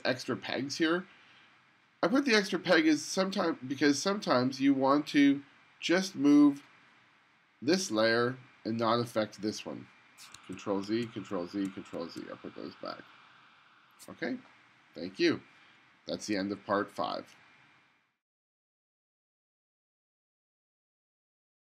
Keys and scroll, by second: 10.6 super+z, 11.7 super+z.